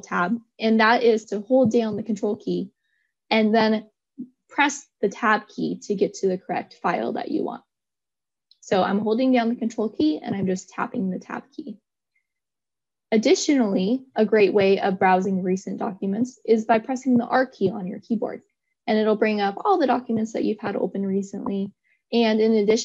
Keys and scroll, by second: 17.1 r.